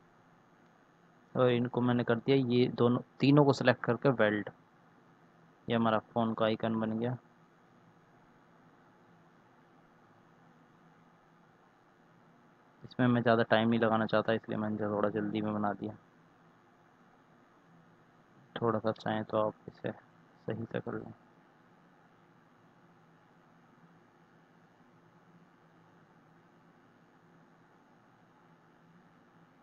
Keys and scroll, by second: 22.5 ctrl+z.